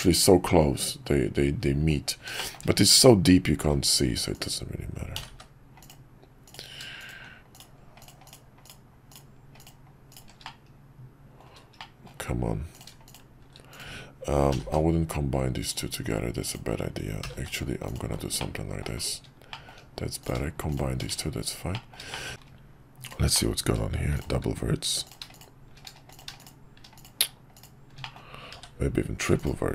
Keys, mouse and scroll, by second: 2.3 shift+middle click, 4.3 click, 5.1 g, 6.4 click, 7.0 shift+click, 7.5 shift+click, 8.0 shift+click, 8.2 shift+click, 8.6-9.7 shift+drag, 10.1 shift+click, 10.4 middle click, 11.8 middle click, 14.5 g, 16.5-18.5 drag, 18.5 middle click, 19.7 middle click, 20.2 click, 20.7 shift+click, 21.2 shift+1, 21.7 middle click, 22.1 middle click, 23.0 click, 23.3 middle click, 24.1 shift+click, 25.0 click, 25.3 shift+click, 26.1 click, 26.4 shift+click, 27.0 click, 27.5 shift+click, 28.0 middle click.